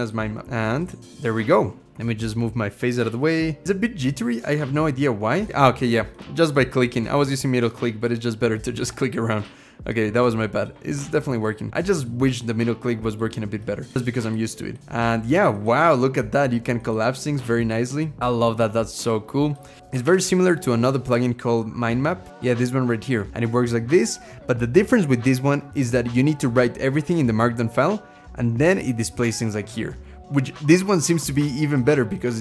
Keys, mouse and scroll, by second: 3.6-4.1 middle click, 3.7 middle click, 3.8 middle click, 5.1 space, 5.5-5.8 scroll down 1, 19.8 ctrl+,, 22.3 typing, 23.3-24.2 scroll down 8, 24.6-25.9 scroll up 1, 25.9-27.4 scroll up 2, 27.4-29.5 scroll down 2, 29.5 scroll down 1.